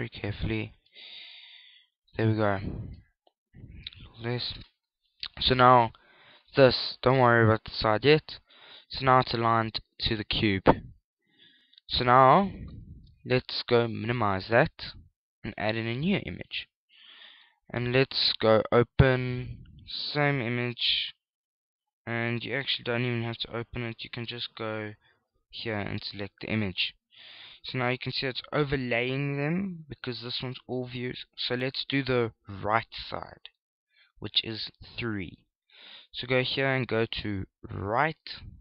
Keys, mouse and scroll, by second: 1.1 s, 3.0 shift+click, 5.2 shift+click, 6.0 middle click, 7.5 KP_1, 9.1 scroll up 4, 9.4 scroll down 1, 9.6-10.1 scroll down 2, 10.1 shift+middle click, 14.6 shift+middle click, 14.9 click, 17.7 middle click, 19.2 click, 23.5 click, 26.0 click, 27.7 scroll up 1, 28.0-29.0 scroll down 5, 28.4-29.0 scroll up 1, 29.0-29.7 scroll down 1, 29.7-30.2 scroll down 2, 32.9 KP_3, 33.9-35.4 scroll up 5, 36.2 click.